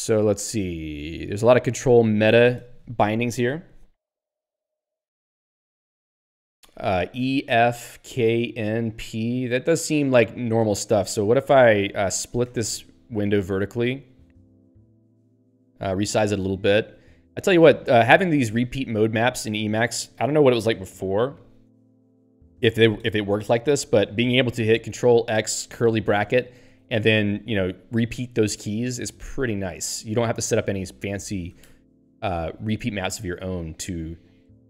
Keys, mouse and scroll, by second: 10.6 click, 10.7 click, 13.2 click, 13.3 click, 17.4 }, 17.9 {, 18.1 }, 19.2 {, 19.6 }, 25.1 ctrl+g, 26.8 {, 27.5 {, 28.2 }, 30.9 click, 31.0 click.